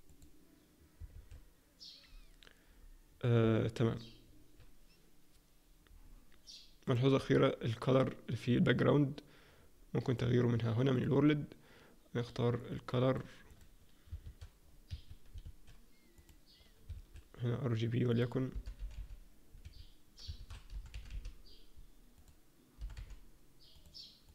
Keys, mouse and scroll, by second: 1.1 alt+a, 6.8 click, 10.1 click, 12.5 click, 13.5 click, 14.2 shift+a, 15.4 alt+a, 16.1 click, 16.9 shift+a, 20.3 shift+a.